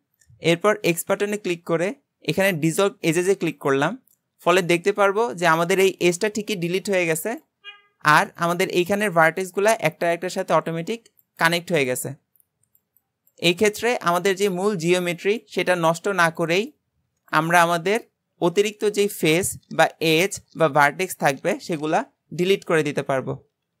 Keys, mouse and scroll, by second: 4.1-23.8 middle drag.